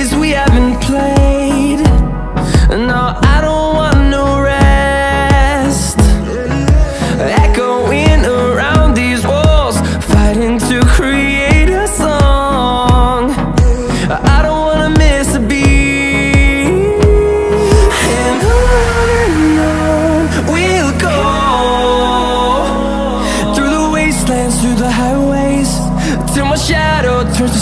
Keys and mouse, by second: 3.3 click, 4.4 click, 11.8-12.5 drag, 14.3-16.6 drag, 19.8 click, 21.0-25.6 drag, 27.1-27.6 middle drag.